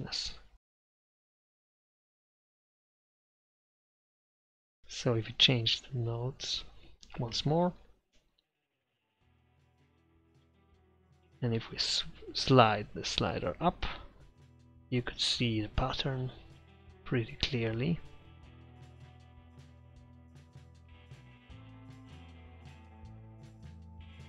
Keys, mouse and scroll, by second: 2.3 KP_5, 8.3-12.5 middle drag.